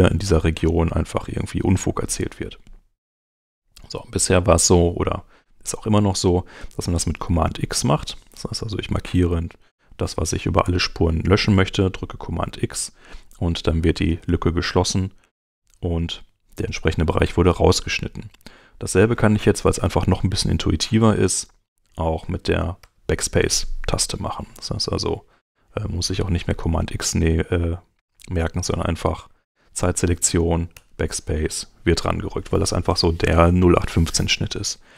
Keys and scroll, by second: 5.6 Escape, 12.2 super+x, 22.5 BackSpace, 30.5 BackSpace.